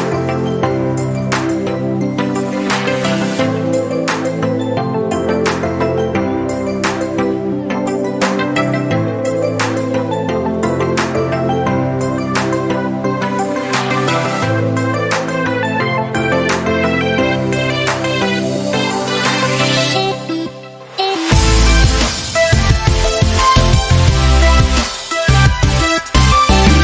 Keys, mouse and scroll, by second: 19.7 click.